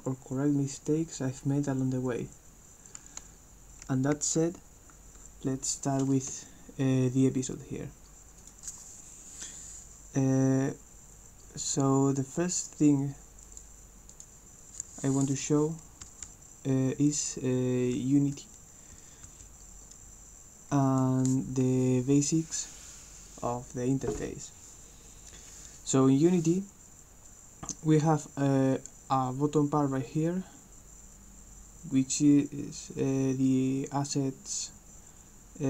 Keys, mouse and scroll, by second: 8.6 click, 13.5 click, 14.1 click, 15.7-21.0 right drag, 16.1 s, 16.4 d, 18.0 w, 19.3 s, 19.6 a.